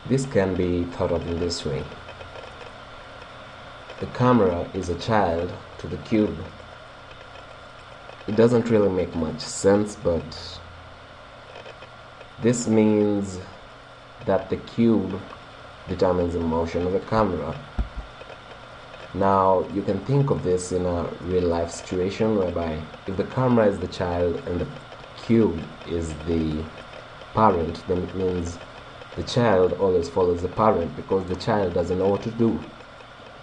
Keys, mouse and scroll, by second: 14.8 right click, 17.8 g, 18.7 right click, 20.4-23.5 middle drag, 23.3 click, 23.3-26.5 right drag, 29.3-33.4 middle drag.